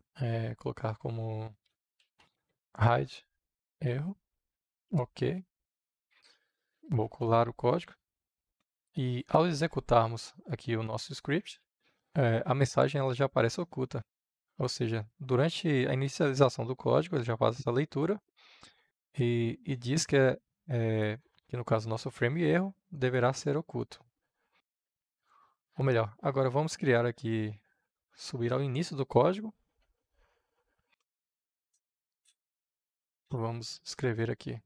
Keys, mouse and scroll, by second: 1.2-4.0 typing, 5.1 Up, 5.6 ctrl+z, 5.8 Return, 7.0 ctrl+v, 8.9-11.5 drag, 11.5 F5, 12.9-24.5 drag, 24.5 Return, 27.1-29.6 middle drag, 32.9 click, 33.7 Return.